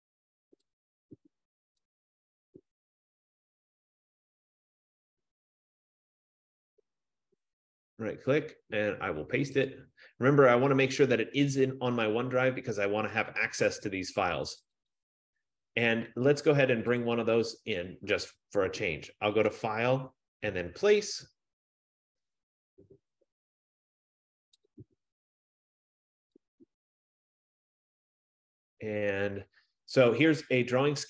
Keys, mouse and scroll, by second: 2.1 click, 4.1 click, 4.2 click, 6.1 click, 6.3 click, 7.2 right click, 9.8 click, 14.8 click, 15.1 click, 17.3 click, 19.7 click, 24.9 click, 26.7 click, 26.9 click, 27.7 click, 28.0 click.